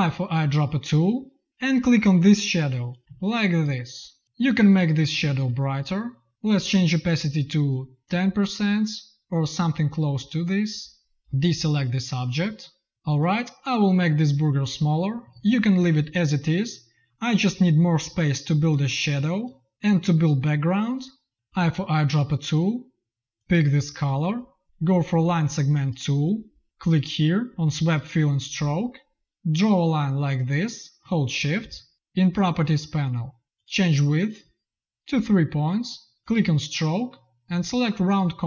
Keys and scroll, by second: 0.3 i, 3.0 z, 3.5 v, 11.4 space, 12.3 v, 21.4 i.